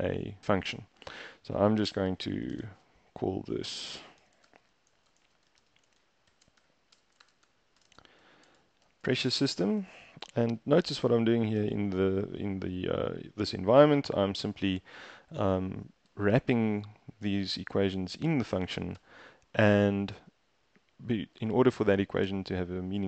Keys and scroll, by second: 1.9-9.6 typing, 9.6 Tab, 10.0 shift+Down, 10.1 shift+Down, 10.3 shift+Down, 10.5 shift+Down, 10.6 shift+Down, 10.8 shift+Down, 11.0 shift+Down, 11.8 Tab, 16.1 Up, 16.3 Up, 16.4 Up, 16.6 Up, 16.9 Up, 17.3 Down, 17.5 Down, 17.6 Down, 17.8 Down, 18.0 Down, 18.5 Down, 19.0 Return.